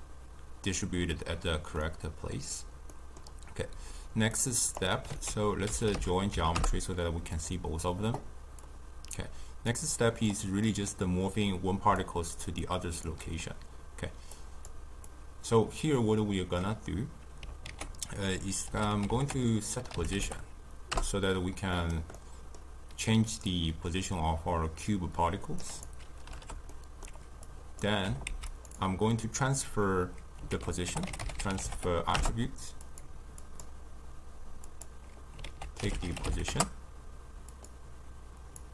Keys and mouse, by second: 4.4-7.3 drag, 7.3 ctrl+a, 9.7-21.7 drag, 23.5-38.7 drag.